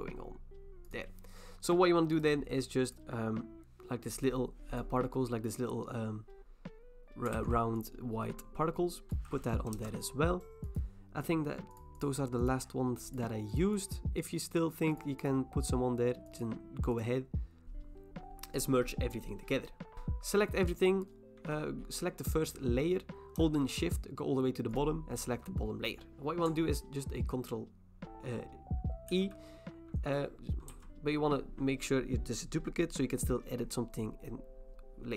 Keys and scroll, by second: 7.3 ctrl+t, 9.7 Return, 17.6 Return, 29.1 ctrl+e, 30.7 ctrl+z.